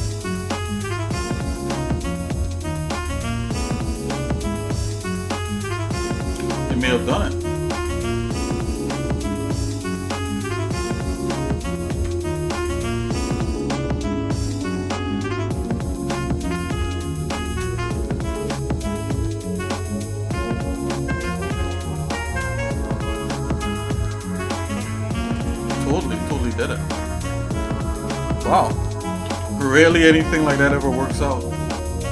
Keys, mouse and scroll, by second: 0.0 shift+middle click, 0.7 click, 3.9 click, 6.2 shift+middle click, 7.3 shift+middle click, 9.5 shift+middle click, 12.0 alt+c, 12.6 click, 13.6 click, 16.3 g, 17.8 Tab, 19.6 a, 20.8 click, 21.7-22.8 shift+middle drag, 23.6 shift+middle click, 24.3 g, 25.8-27.2 shift+middle drag, 27.5 Tab, 28.0 shift+middle click, 29.3 ctrl+s, 30.1 middle click, 30.6 shift+middle click.